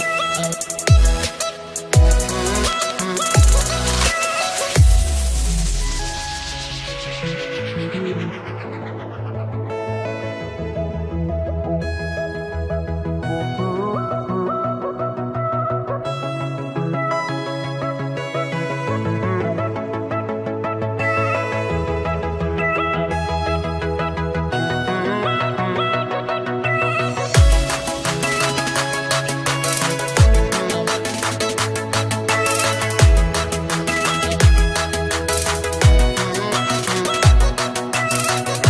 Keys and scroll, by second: 33.8 ctrl+t.